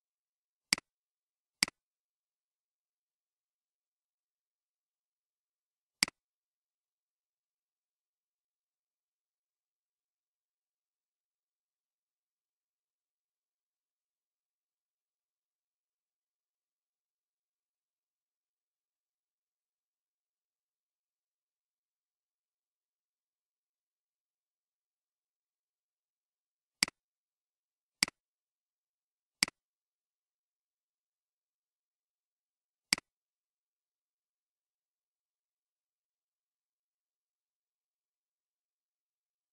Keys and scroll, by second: 37.8 8, 38.7 Return.